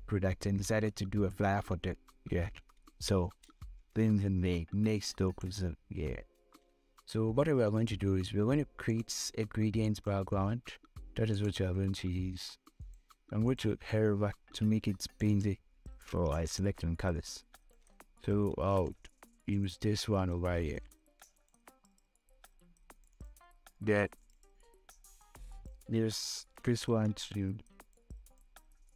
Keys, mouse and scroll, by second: 2.7 ctrl+a, 3.3 ctrl+v, 6.2 click, 8.6 click, 18.9 ctrl+c, 19.8 click, 21.0 ctrl+v, 24.4-26.9 drag, 26.9 ctrl+c, 28.2 click.